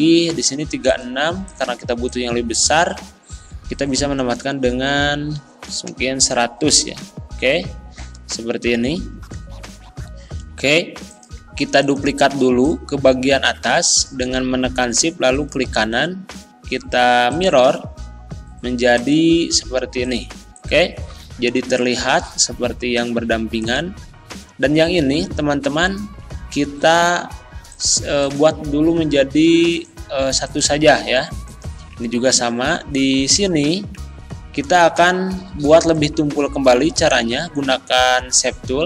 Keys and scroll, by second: 5.2 1, 5.7 0, 6.7 Return.